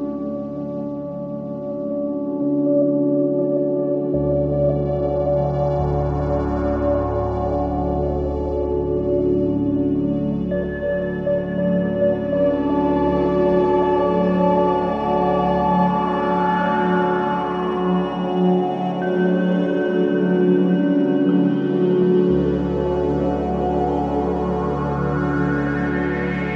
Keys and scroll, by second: 14.2 Delete, 15.1 Delete.